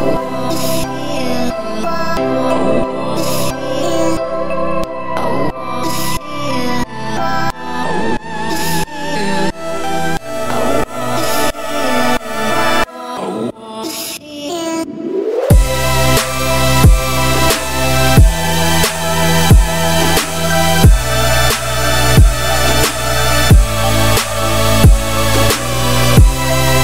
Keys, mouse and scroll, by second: 0.7 g, 3.5 z, 4.4 g, 6.7 g, 8.4-9.0 shift+scroll up 5, 8.6 shift+middle click, 9.0 z, 9.5 g, 11.6 shift+middle click, 11.8-12.1 scroll up 5, 12.1 z, 12.5-13.0 shift+scroll up 4, 12.6 shift+middle click, 13.3 shift+middle click, 13.5-15.3 scroll up 11, 14.2 shift+middle click, 15.3 g, 17.4 z, 17.7-18.9 scroll down 27, 18.9 g, 19.9-20.9 scroll up 9, 20.2 shift+middle click, 20.5 z, 20.9 g, 22.2 scroll up 4, 22.4 shift+scroll down 1, 22.5 shift+middle click, 22.6-23.0 scroll up 1, 23.0 g, 24.5-25.3 scroll down 11, 24.9 z, 25.3 middle click, 25.7 Tab, 25.8-26.4 scroll down 2, 25.9 middle click, 26.4 ctrl+s, 26.6-26.8 scroll up 5.